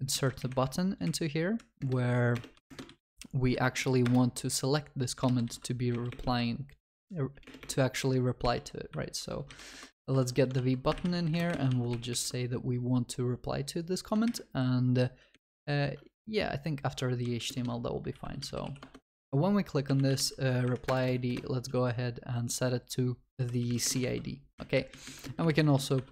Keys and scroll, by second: 0.1 ctrl+x, 2.9 ctrl+v, 9.8 Return, 10.6 ctrl+s, 14.3 alt+shift+Up, 15.3 alt+shift+Down, 18.8 Return, 24.1 ctrl+s.